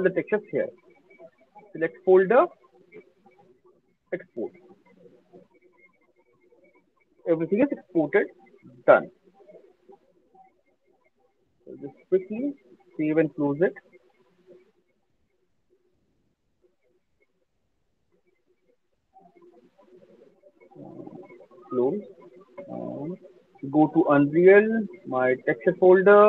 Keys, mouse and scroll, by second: 1.7 click, 4.4 click, 10.5 click, 11.9 click, 13.0 click, 19.0 click, 20.5 right click, 21.7 click, 23.2 click.